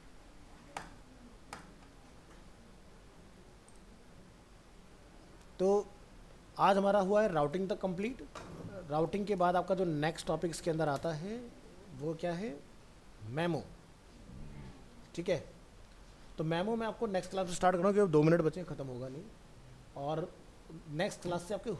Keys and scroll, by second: 9.5 shift+Left, 10.3 shift+Right.